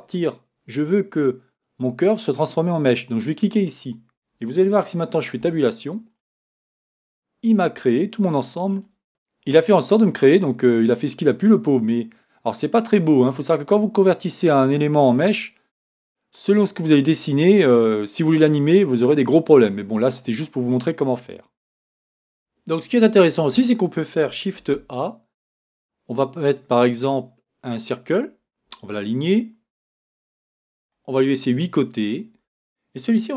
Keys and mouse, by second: 5.4 Tab, 6.6 middle click, 12.6-15.5 middle drag, 21.6 Tab, 24.5 shift+a.